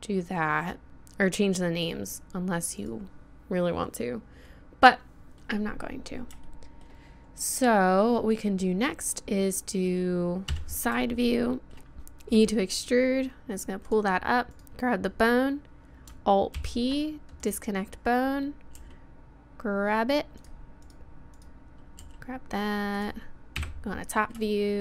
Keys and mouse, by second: 0.9-4.6 right drag, 4.6 middle click, 5.5 middle click, 10.5 KP_3, 12.4 e, 14.5-16.6 drag, 16.6 alt+p, 17.5-18.8 drag, 18.8 g, 20.8-22.2 drag, 22.0 g, 23.2 middle click, 23.6 KP_7, 24.5-24.8 middle drag.